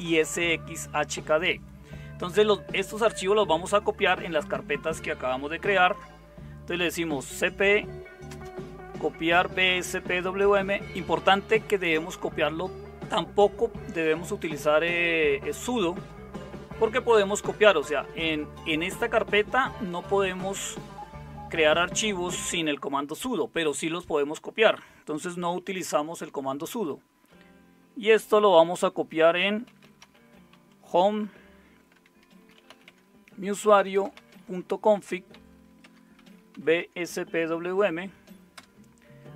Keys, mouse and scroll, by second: 6.5-10.1 typing, 28.8-31.0 typing, 31.9 Tab, 32.1-36.8 typing, 38.5 typing.